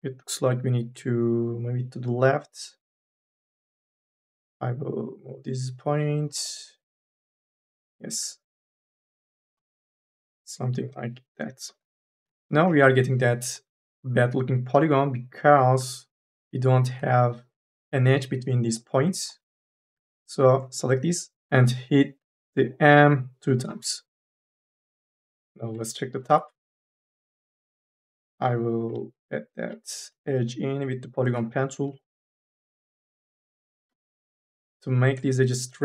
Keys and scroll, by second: 3.5 1, 5.9 3, 12.3 3, 12.5 e, 16.8 1, 21.3 m, 21.4 ctrl+z, 23.5 m, 25.4 3, 26.2 1, 28.0 1, 28.6 m, 28.9 e, 30.3 e, 31.9 e, 33.6 2, 33.8 e.